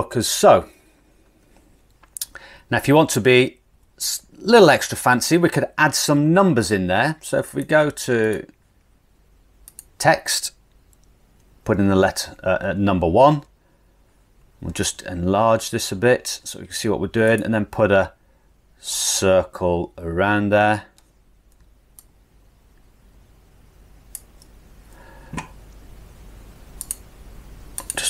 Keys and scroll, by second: 11.7 1, 14.9 super+=, 15.8 super+=.